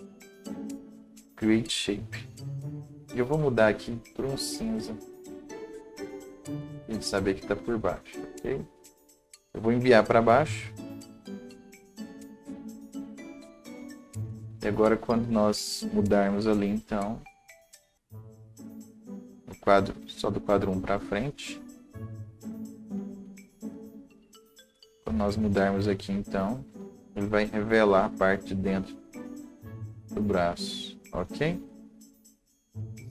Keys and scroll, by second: 12.6 Down, 14.8 Down, 18.9 ctrl+z, 23.8 Delete.